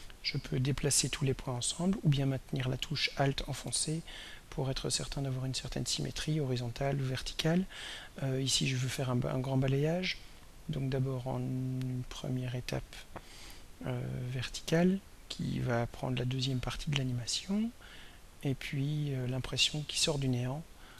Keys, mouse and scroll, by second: 0.2-12.6 drag, 15.4-17.3 drag, 20.6-20.9 drag.